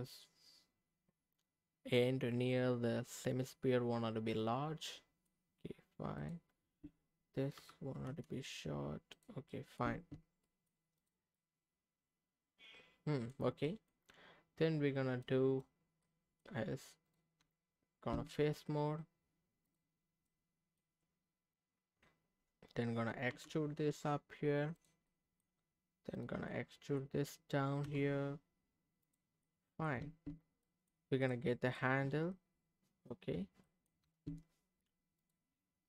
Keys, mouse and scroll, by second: 6.2 click, 7.6 g, 8.0 z, 9.1 click, 9.5 middle click, 9.8 Tab, 10.4 middle click, 11.0 click, 11.3-13.3 middle drag, 13.6 middle click, 15.2 click, 15.8 scroll up 2, 16.0 middle click, 16.4 scroll up 1, 17.1 click, 17.4 Tab, 18.4-19.1 scroll down 2, 19.6 click, 20.3 middle click, 20.3 scroll up 1, 21.7-22.7 scroll up 1, 23.3 e, 24.8 click, 25.1 middle click, 26.1 click, 26.5 middle click, 27.8 e, 29.0 click, 29.4 middle click, 30.0 Tab, 30.6 middle click, 31.2 click, 31.5 scroll down 2, 31.8-33.1 middle drag, 33.3 scroll up 1, 33.6 middle click, 34.0 Tab, 35.2 click.